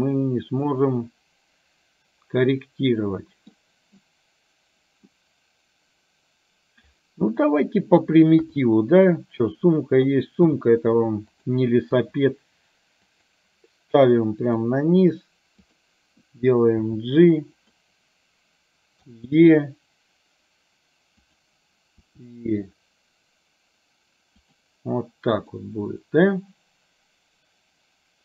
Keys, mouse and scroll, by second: 0.8-3.7 middle drag, 8.5 KP_3, 10.5 s, 12.0 g, 16.9 g, 19.1 e, 22.0 e, 25.6-28.2 middle drag.